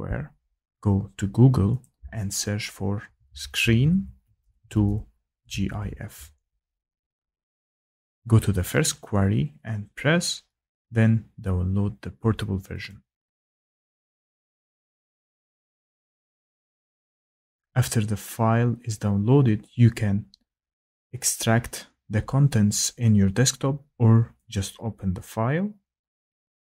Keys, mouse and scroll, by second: 1.8 click, 2.7-7.4 typing, 8.8-9.6 typing, 11.2 typing, 12.1 click, 12.9 click, 24.5 click, 26.5 click.